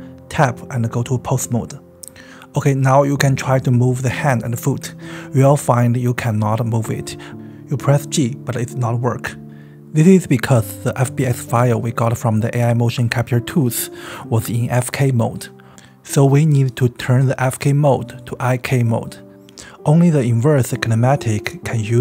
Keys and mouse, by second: 0.1 Tab, 3.7 click, 6.6 right click.